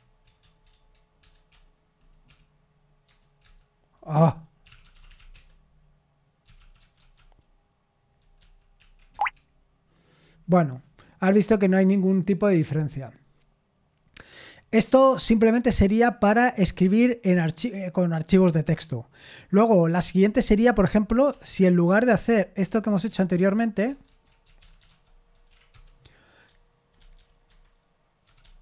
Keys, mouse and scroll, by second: 0.2 BackSpace, 0.4 BackSpace, 0.5 BackSpace, 0.7 BackSpace, 3.1 Tab, 3.4 Return, 4.4-7.6 typing, 8.4 Down, 8.8 Right, 9.1 Return, 21.3 super+l, 22.2 ctrl+p, 22.6 ctrl+p, 23.1 c, 24.1 ctrl+c, 24.2-25.3 typing, 25.5 Right, 25.7 Return, 26.5-28.6 typing.